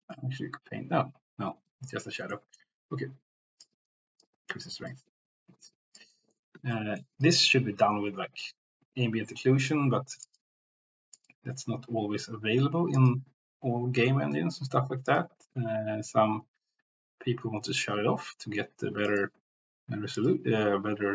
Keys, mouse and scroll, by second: 0.0 ctrl+z, 0.2 ctrl+z, 1.0 ctrl+z, 1.9 shift+middle click, 2.3 middle click, 2.9 click, 4.2 click, 4.9-6.0 drag, 6.1 middle click, 6.7 shift+middle click, 10.4-13.0 drag, 19.2 click.